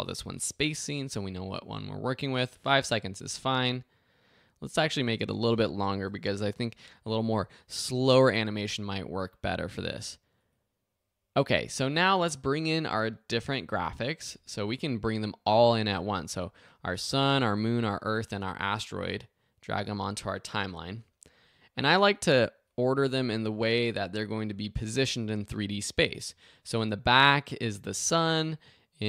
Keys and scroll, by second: 0.0-1.0 typing, 5.9 BackSpace, 6.4 8.